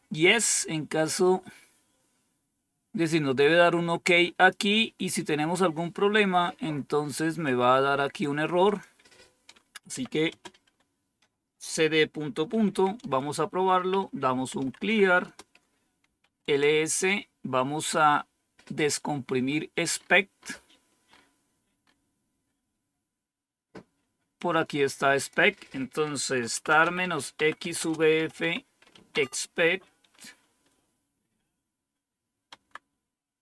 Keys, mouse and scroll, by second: 3.8 click, 7.4 click, 8.6 click, 9.8-10.6 typing, 12.5-16.5 typing, 12.9 Return, 19.9-20.4 scroll up 2, 21.0-21.8 scroll up 2, 21.8-22.6 scroll up 1, 24.3 click, 25.1 click, 26.1-29.4 typing, 32.5 Tab.